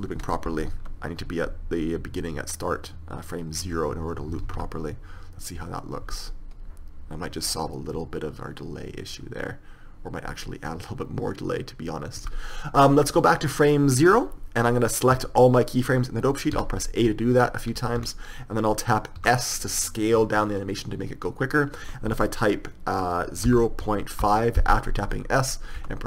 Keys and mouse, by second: 4.8 alt+a, 12.5 Escape, 13.4 click, 19.5 a, 19.5 s.